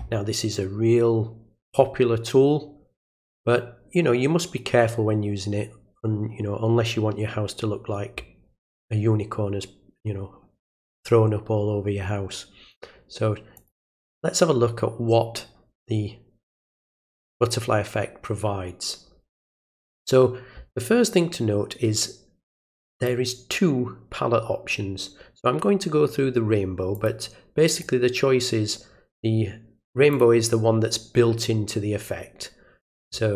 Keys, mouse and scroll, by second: 1.6 click, 13.5 click, 22.9 click, 26.9 click, 27.6 click, 30.1 click.